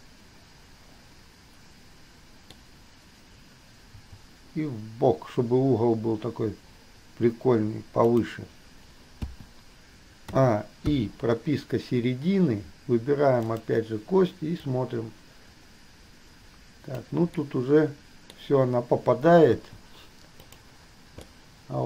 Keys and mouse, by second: 2.7 click, 4.2 g, 9.5 i, 10.6 a, 11.2 i, 13.7 click, 14.8-17.2 drag, 17.6-18.6 drag, 19.8 i, 20.6 middle click, 21.5-21.8 middle drag.